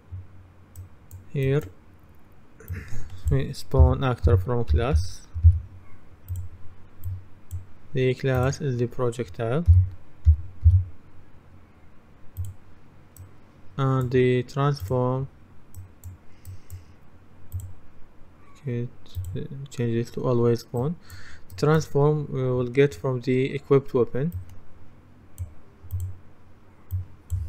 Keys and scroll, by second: 3.8-5.5 typing, 9.8-10.7 typing.